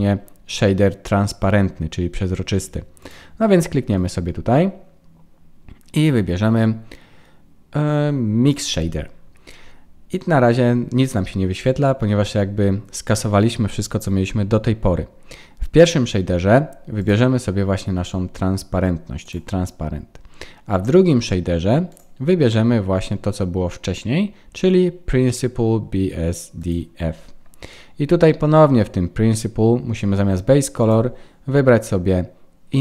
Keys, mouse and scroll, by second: 3.0 click, 17.0 click, 21.9 click, 30.8 click.